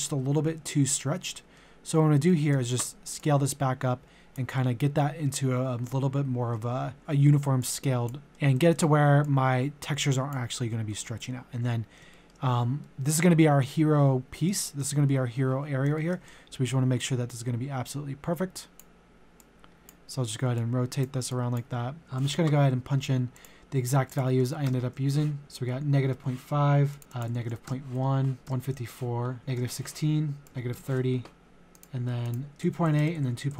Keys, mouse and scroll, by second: 3.2 click, 4.5-6.7 middle drag, 6.7 g, 7.0 click, 8.3 middle click, 9.2-10.9 drag, 11.5 middle click, 12.1 shift+middle click, 12.5 scroll down 1, 12.8-14.5 middle drag, 14.6 shift+middle click, 15.1-15.7 scroll down 1, 15.7 scroll up 1, 16.9-21.3 drag, 22.2 ctrl+c, 23.4 click, 24.4 ctrl+v, 24.7 Tab, 26.9 click, 27.0 ctrl+c, 27.1 click, 27.4 ctrl+v, 27.7 Tab, 28.4 ctrl+v, 28.5 Tab, 29.4 ctrl+v, 29.6 Tab, 30.4 click, 30.7 ctrl+a, 30.7 Tab, 31.7 click, 32.2 click, 32.5-33.5 typing, 33.0 Tab.